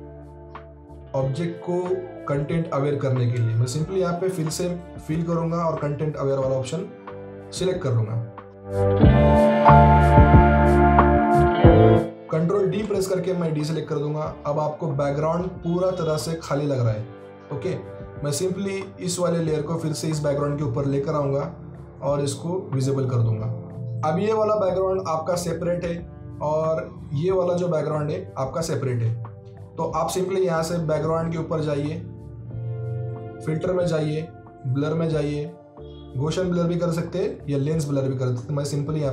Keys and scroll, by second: 12.7 ctrl+d, 28.9 ctrl+z.